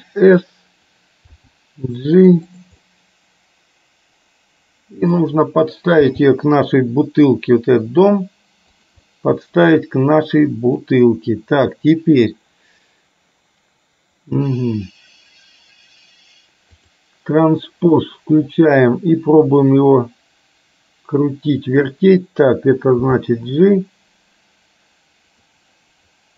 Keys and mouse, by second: 1.5 g, 3.0-5.2 middle drag, 6.1 g, 9.3-10.8 middle drag, 17.0 click, 19.8-21.9 drag, 23.1 g.